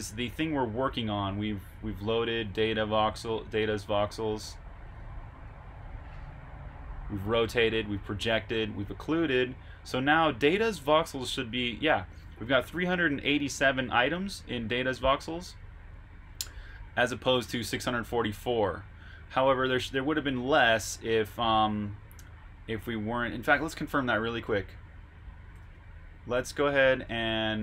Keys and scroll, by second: 25.5 super+Tab, 27.0 Escape.